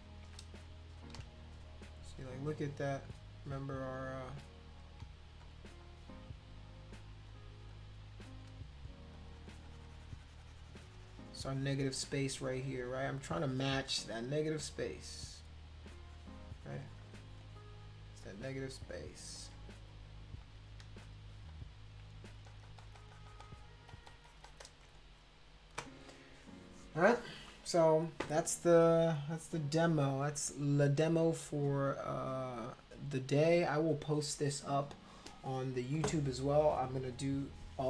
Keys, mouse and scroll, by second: 0.5 click, 1.0 click, 3.0 shift+click, 3.9 shift+click, 4.8 click, 5.4 shift+click, 5.8 shift+click, 6.1 shift+click, 6.8 shift+click, 7.3 shift+click, 7.7 shift+click, 8.0 shift+click, 8.2 shift+click, 9.2-14.2 drag, 14.7-15.8 drag, 16.0-17.1 drag, 18.2 click, 18.7 click, 18.9 click, 19.3 click, 19.9 click, 20.4 click, 21.0 shift+click, 21.5 shift+click, 22.5 click, 22.6 click, 22.8 click, 22.9 click, 23.1 click, 23.3 click, 23.4 click, 23.9 click, 24.1 click, 24.3 click, 24.4 click, 24.6 click.